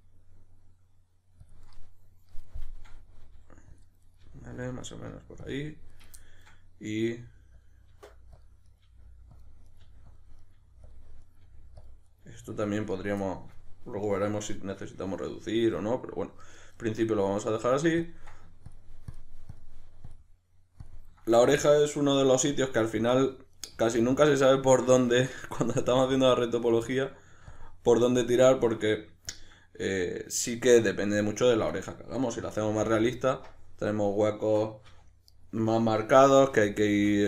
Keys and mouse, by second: 2.7-3.8 middle drag, 3.2 g, 3.8 click, 4.0 right click, 4.2 middle click, 4.2 g, 4.6 click, 4.9 right click, 5.1 middle click, 5.1 g, 5.5 click, 5.9 right click, 6.2-6.9 middle drag, 6.9 right click, 7.2 g, 7.6 click, 7.9 g, 8.4 click, 8.6 right click, 8.8 g, 9.4 click, 9.6 right click, 9.8 g, 10.2 click, 10.4 right click, 10.6 g, 10.9 click, 11.2 right click, 11.4 g, 11.8 click, 12.1 right click, 12.2 g, 12.6 click, 13.2-16.4 shift+middle drag, 16.4 right click, 16.8-18.0 middle drag, 18.0 ctrl+click, 21.3 right click, 21.5-23.0 middle drag, 22.3 g, 23.0 click, 23.5 right click, 23.7 g, 24.3 click, 24.7 right click, 25.5 right click, 25.7 g, 26.2 click, 26.5 right click, 26.8-27.5 middle drag, 27.5-28.5 ctrl+drag, 28.5-29.3 middle drag, 29.3-31.7 ctrl+drag, 31.7 shift+right click, 32.6 f, 35.3 right click, 36.2 f.